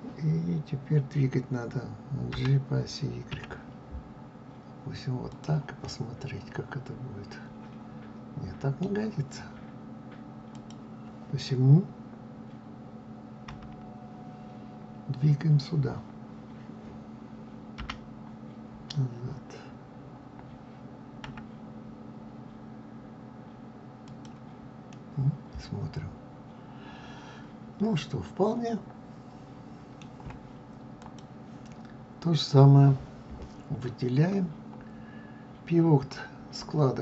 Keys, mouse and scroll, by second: 2.0 g, 5.6-8.6 middle drag, 10.3 click, 13.1 KP_3, 17.5 g, 24.6-28.2 middle drag, 30.7 click.